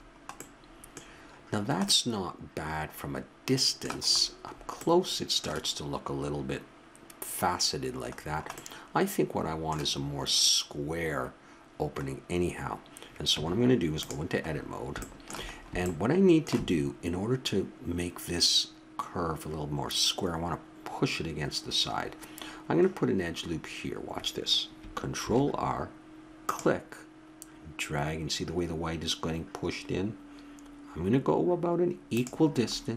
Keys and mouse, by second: 4.1-7.2 middle drag, 8.2-10.3 middle drag, 13.3 Tab, 14.5-16.7 middle drag, 19.5-22.0 middle drag, 24.0 middle click, 25.2 ctrl+r, 32.6-32.9 middle drag.